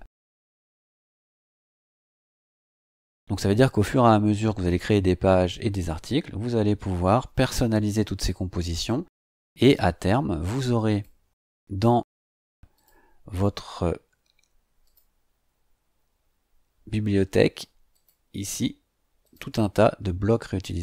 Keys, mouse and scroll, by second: 10.9 click, 12.7 click, 14.8 click, 17.9 click, 19.2 click.